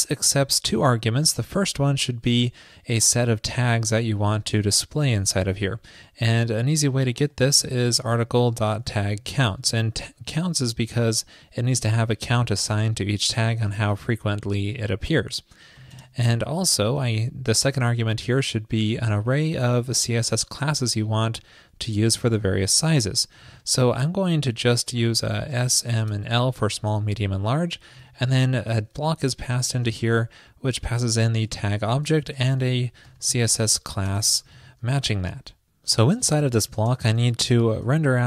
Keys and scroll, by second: 10.3 alt+shift+Left, 36.5 ctrl+shift+..